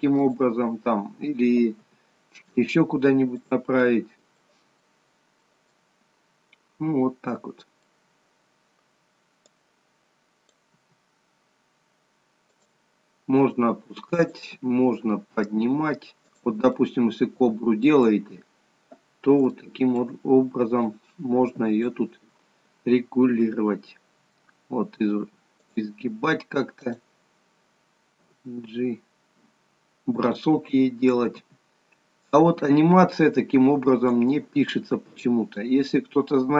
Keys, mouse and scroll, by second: 0.3 click, 2.1 g, 4.0 middle click, 4.9 middle click, 8.3 scroll down 2, 9.7 click, 11.0 g, 13.7 click, 14.8 g, 16.9 middle click, 18.9 scroll up 2, 19.8 shift+middle click, 21.0 click, 23.5 r, 27.0 click, 28.4 g, 30.9 click, 31.6 g, 35.7 middle click.